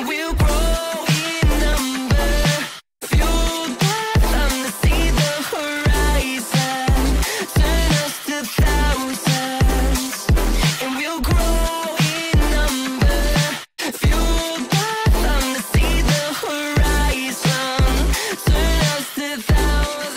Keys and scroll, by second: 2.1 c, 2.4 shift+F2, 2.6 Escape, 3.1 F3, 7.9 Escape, 10.9 c, 13.7 Escape, 16.7 c.